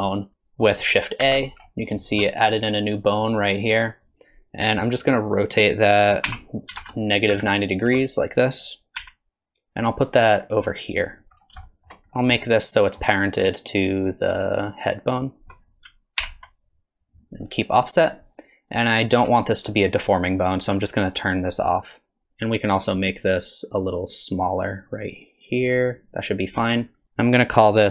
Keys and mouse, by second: 0.3 ctrl+z, 0.3 shift+d, 1.2 shift+a, 2.0 shift+click, 3.2 click, 6.3 r, 9.0 g, 11.7 shift+click, 11.7 shift+middle click, 12.4 middle click, 15.2 shift+click, 16.2 ctrl+p, 20.6 click, 23.8-26.6 shift+drag.